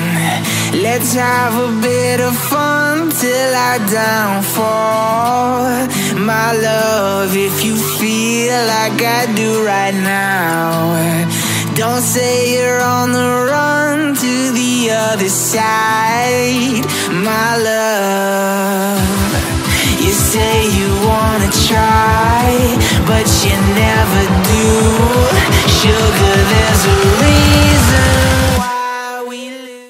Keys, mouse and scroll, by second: 10.3 ctrl+click, 13.4 alt+click, 20.5 alt+click, 24.9 alt+scroll down 1, 25.0 alt+scroll up 1, 25.3 alt+scroll down 1, 26.4 alt+scroll down 1.